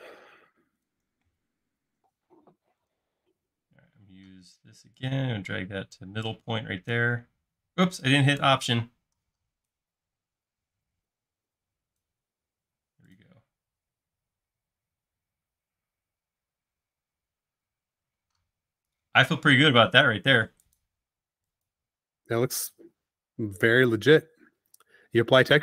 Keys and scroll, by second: 12.8 space, 20.2 e, 22.4 space.